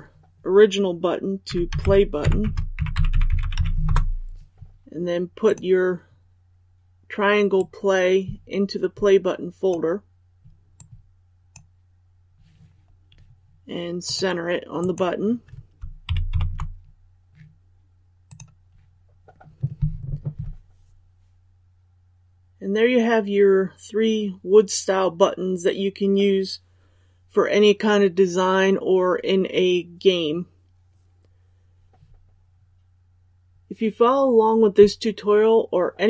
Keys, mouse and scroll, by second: 3.1 space, 3.8 Return, 5.4-10.1 drag, 10.4-14.8 drag, 16.0 shift+Up, 16.3 shift+Up, 18.2 click.